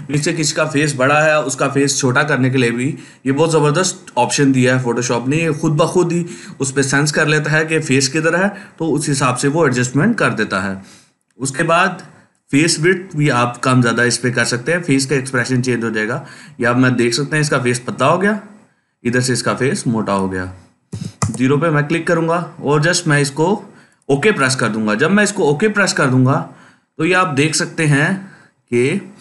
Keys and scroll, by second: 20.8 0, 21.0 Return.